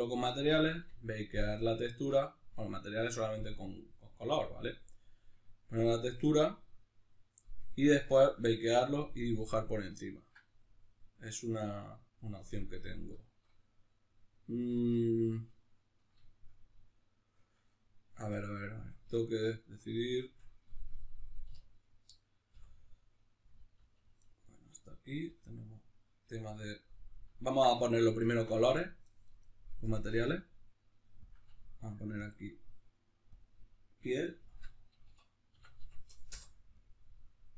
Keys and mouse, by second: 21.7 right click, 22.5 l, 24.2-29.9 middle drag, 25.3 l, 26.5 l, 29.9-37.5 drag, 36.3 Return.